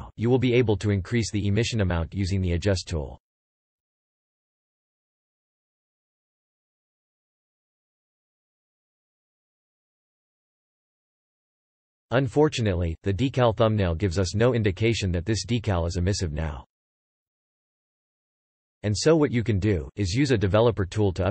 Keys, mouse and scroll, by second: 0.0 shift+middle click, 0.6 shift+middle click, 1.1 shift+d, 5.5 f, 6.0 shift+scroll down 2, 6.2-6.8 shift+middle drag, 7.2 d, 7.2 a, 7.8 e, 8.4 x, 9.6-10.1 middle drag, 10.4 scroll down 2, 10.9-12.5 typing, 14.4 ctrl+middle click, 14.8 ctrl+a, 15.1 ctrl+shift+click, 15.2 ctrl+shift+middle click, 15.4 ctrl+shift+d, 17.0 Escape, 17.3 shift+middle click, 17.6 shift+scroll down 2, 17.7 shift+scroll up 1, 17.8 shift+middle click, 18.1 shift+middle click, 18.4 shift+g, 18.5 x, 18.7 shift+middle click, 20.0-21.3 typing, 20.7 Escape.